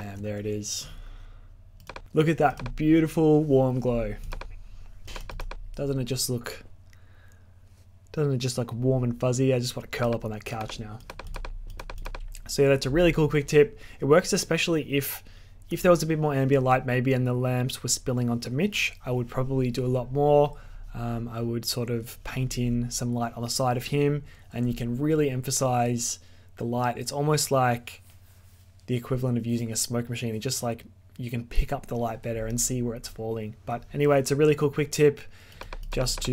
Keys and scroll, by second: 0.1 alt+z.